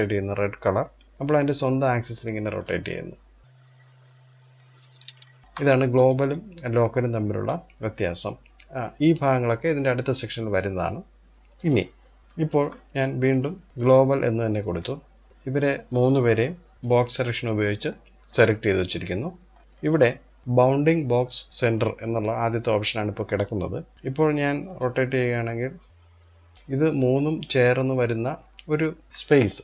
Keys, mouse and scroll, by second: 3.4 click, 4.8 ctrl+z, 5.1 shift+middle click, 5.7-8.7 drag, 11.9 click, 12.2-12.9 shift+middle drag, 12.9-14.0 drag, 14.0-14.4 scroll down 1, 14.4-15.3 middle drag, 15.3 click, 16.5 click, 16.7 b, 17.5-17.9 middle drag, 17.9-18.5 scroll up 1, 18.5-19.6 shift+middle drag, 19.6-21.6 drag, 23.9 click.